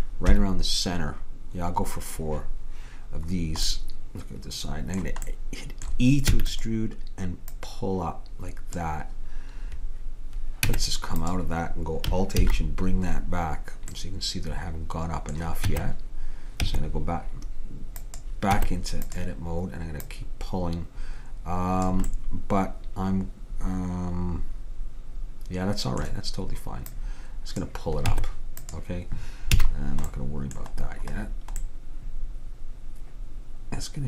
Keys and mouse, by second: 0.3 KP_7, 6.3 e, 7.7-9.5 drag, 10.7 Tab, 12.5 alt+h, 15.7 Tab, 16.7 Tab, 18.6 Tab, 20.1-21.9 drag, 22.2-24.3 middle drag, 26.9-28.8 drag, 28.2 Tab, 29.7 a.